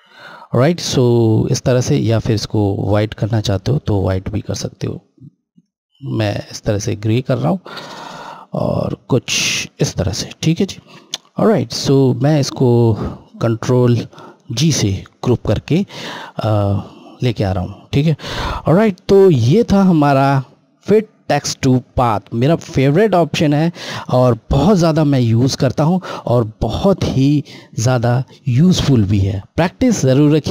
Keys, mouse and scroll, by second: 2.2 click, 5.4 click, 9.7 click, 10.4 scroll down 1, 11.3 click, 12.7 scroll up 1, 12.8 scroll, 14.8 ctrl+g.